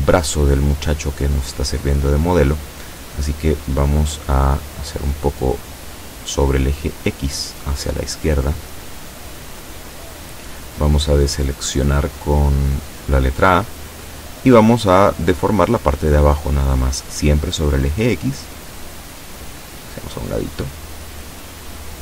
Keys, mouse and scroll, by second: 0.4 b, 1.4-3.2 drag, 5.0-9.8 drag, 12.4 a, 13.1 b, 14.5-15.7 drag, 18.1-22.0 drag.